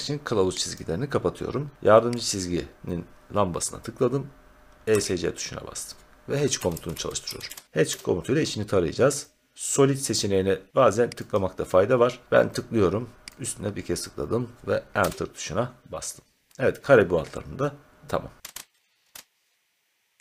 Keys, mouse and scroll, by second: 0.7 click, 2.2 click, 4.9 Escape, 6.3-7.9 typing, 11.3 click, 13.4 click, 14.9 Return, 16.2 scroll, 18.3-19.0 typing, 18.5-19.1 scroll, 19.1 Return.